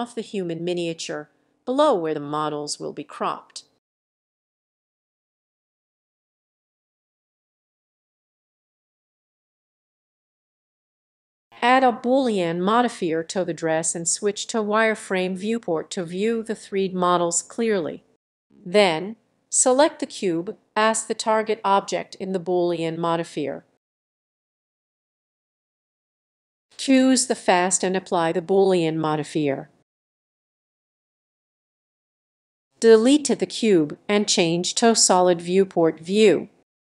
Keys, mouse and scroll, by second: 0.2 s, 1.3 click, 1.7-2.0 scroll down 2, 2.3 g, 6.8-8.9 drag, 9.5-16.4 drag, 16.7-19.0 drag, 19.0-20.4 scroll up 1, 20.4-25.1 drag, 27.0 click, 29.0 click, 33.3 click, 34.8 Delete, 36.3 click.